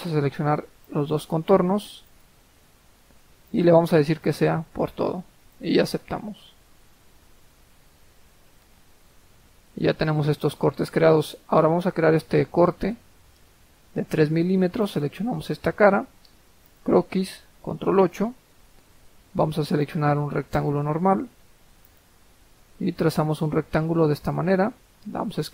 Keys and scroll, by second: 17.9 ctrl+8, 25.1 Escape.